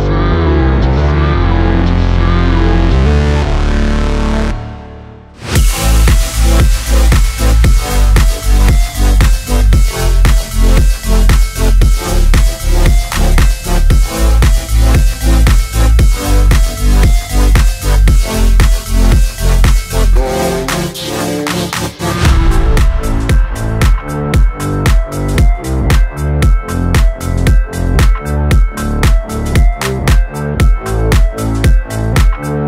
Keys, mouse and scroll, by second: 0.8 space, 1.5 Down, 2.6 Up, 2.8 Down, 3.6 space, 4.8 click, 5.1 space, 6.8-10.3 drag, 10.3-12.0 drag, 12.0 space, 14.0 click, 14.3 space, 16.6-17.6 scroll down 1, 17.6-26.8 drag, 28.2 r, 29.6 alt+click, 30.0-31.3 typing.